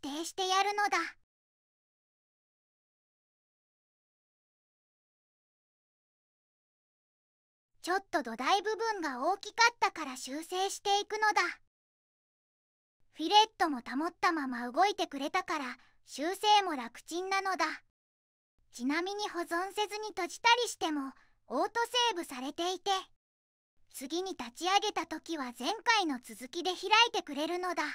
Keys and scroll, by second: 3.8 x, 10.8 ctrl+z.